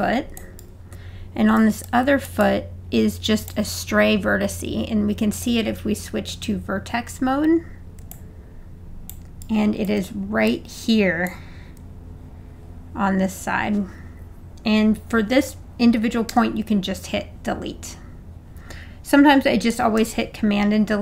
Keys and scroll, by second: 16.3 BackSpace, 20.0 super+BackSpace.